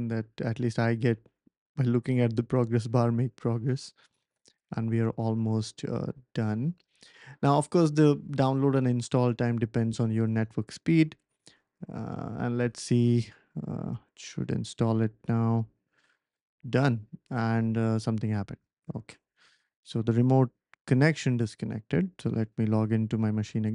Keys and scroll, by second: 16.3 Return, 16.3 typing, 17.5-18.1 typing.